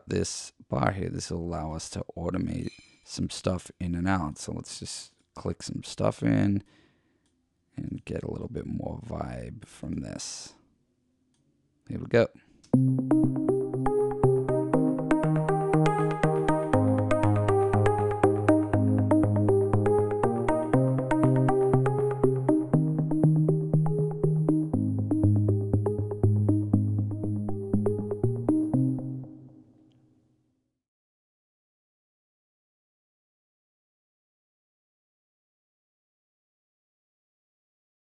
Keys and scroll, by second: 12.7 space, 13.3 space, 28.7 space, 29.3 space.